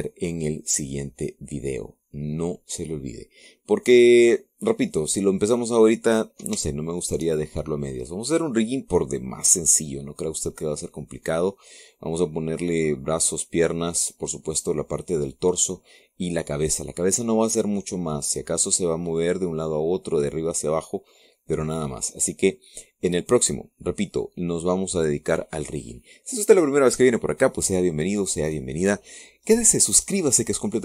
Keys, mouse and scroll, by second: 5.5-5.8 scroll down 1, 6.1-6.4 scroll up 2, 7.5 shift+middle click, 8.3-13.4 shift+middle drag, 17.5 scroll down 2, 17.8-20.2 drag, 21.6-23.3 drag, 23.8 scroll down 2, 25.8-26.2 scroll up 2, 26.4 scroll down 1.